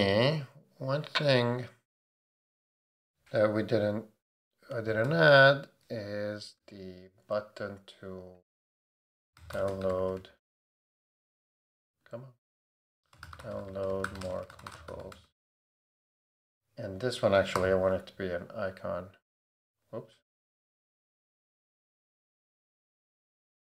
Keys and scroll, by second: 4.8 /, 6.6 Return, 8.9 Return, 9.0-10.6 typing, 11.9 Return, 12.9-15.5 typing, 17.5 alt+super+t, 20.3 super+z.